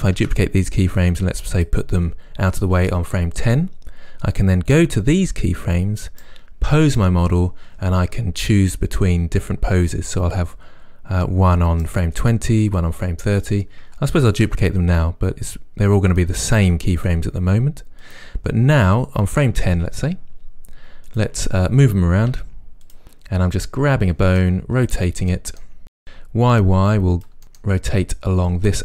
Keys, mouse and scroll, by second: 0.3 shift+d, 1.7 click, 4.8-16.2 right drag, 14.4 shift+d, 15.3 shift+d, 16.2 click, 16.7 shift+d, 17.6 shift+d, 18.1 click, 21.1 click, 22.4 r, 23.1 middle click, 23.4 click, 23.6 r, 23.9-27.3 middle drag, 24.6 r, 26.3 r, 27.3 click, 27.4-28.8 middle drag.